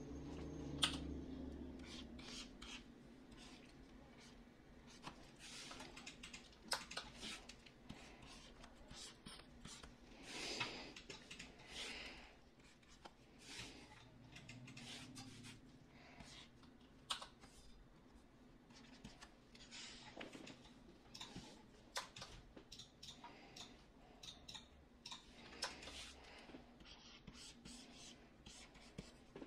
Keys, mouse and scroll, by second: 0.7 f, 17.0 x.